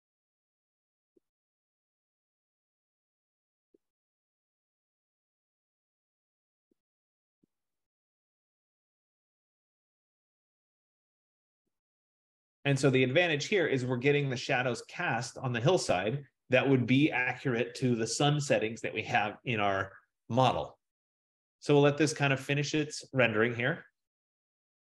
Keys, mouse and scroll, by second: 3.1 click.